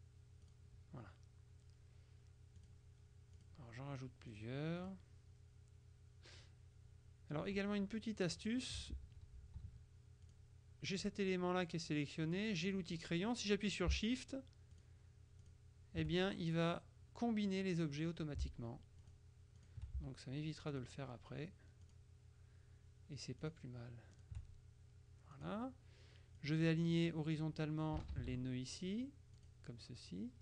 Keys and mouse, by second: 0.5 click, 2.7 click, 3.5 click, 4.4 click, 8.5 click, 9.1 ctrl+z, 10.3 click, 12.3 click, 14.9 shift+click, 15.5 click, 19.1 shift+click, 20.8 click, 21.9 click, 23.5 click, 24.2 click, 25.4 click, 26.5-28.0 drag, 28.3 ctrl+shift+a, 29.5 click.